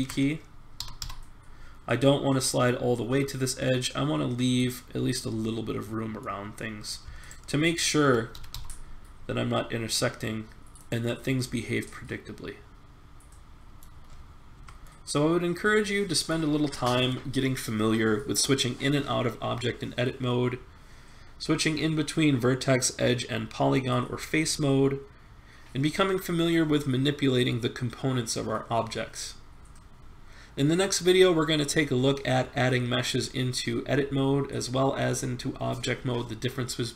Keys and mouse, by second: 0.8 g, 7.2 click, 8.1 middle click, 8.3-9.5 drag, 8.3 g, 11.0 middle click, 12.9 middle click, 13.7 middle click, 14.6 Tab.